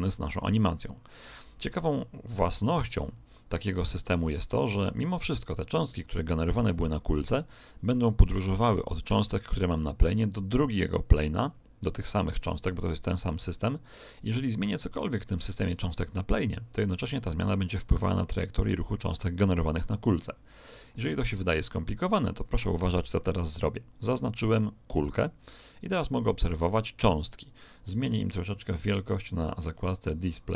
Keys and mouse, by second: 5.3 right click, 15.7 right click, 17.6-19.5 middle drag, 23.3 right click, 28.0-30.5 middle drag, 29.3 click.